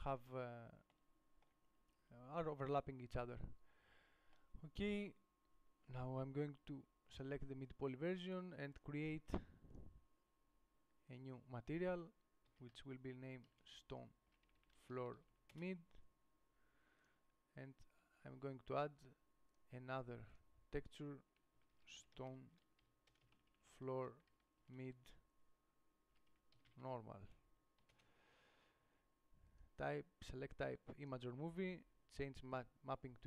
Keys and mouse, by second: 4.4-7.4 middle drag, 15.7 o, 19.8-28.2 drag.